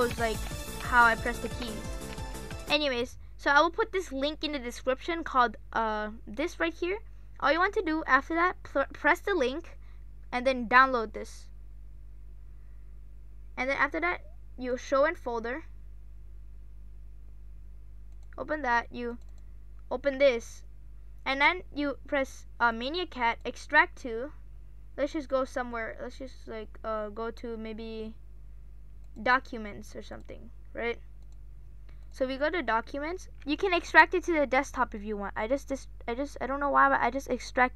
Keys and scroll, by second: 0.0-2.9 typing.